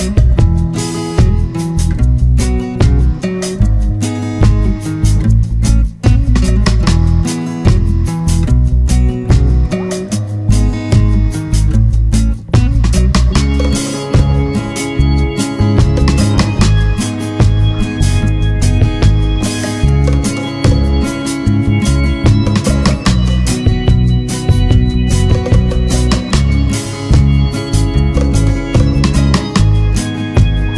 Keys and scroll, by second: 6.5 ctrl+=, 7.4 ctrl+-.